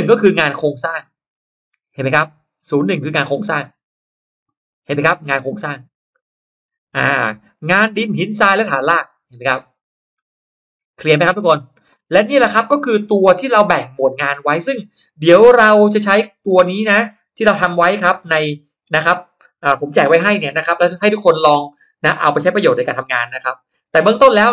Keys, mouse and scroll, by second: 1.5-4.1 drag, 8.9-11.7 drag, 12.3-12.9 scroll down 2, 13.5-14.1 scroll up 1, 14.3 click, 17.6 click.